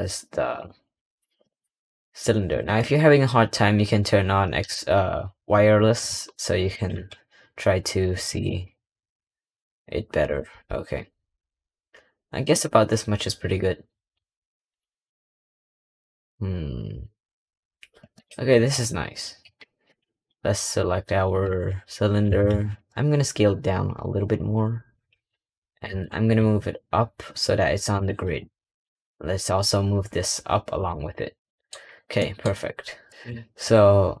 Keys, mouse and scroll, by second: 0.3 scroll up 2, 0.5 scroll down 3, 1.1 s, 1.5 g, 2.7-4.5 scroll up 1, 19.8 click, 28.4 click, 31.5 middle click, 31.6-32.1 scroll down 3, 32.1 middle click, 32.4-34.2 scroll down 1.